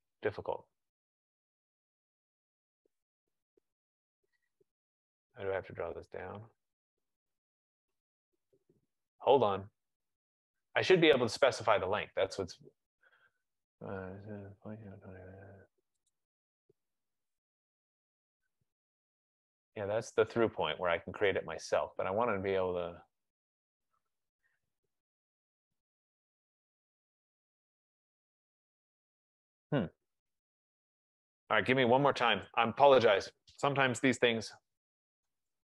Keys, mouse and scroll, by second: 10.3 middle click, 16.2 click, 18.3 click, 23.7 click, 25.7 click, 27.1 F15, 28.8-30.9 drag, 32.5 Escape, 34.5-35.6 typing.